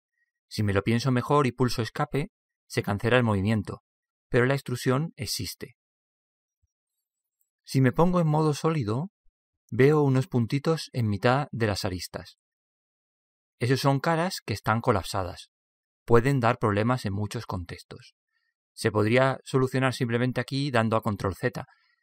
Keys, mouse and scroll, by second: 5.7-7.6 middle drag, 8.7-10.7 drag, 10.3 middle click, 10.7-13.9 middle drag, 14.7-18.7 middle drag.